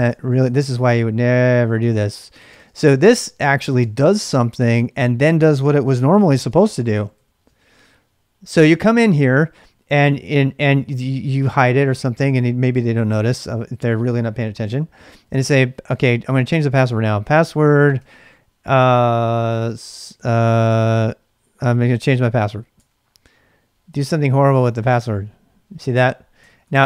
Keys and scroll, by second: 0.0-4.9 typing, 6.1-7.1 typing, 6.5 ctrl+[, 15.2 typing, 16.3-18.0 typing, 19.5 typing, 22.8 Return, 24.0 ctrl+c, 26.2-26.8 typing.